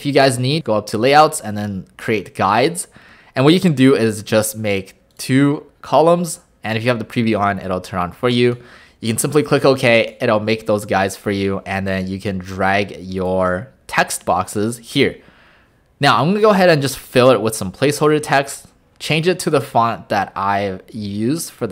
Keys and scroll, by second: 18.2 a.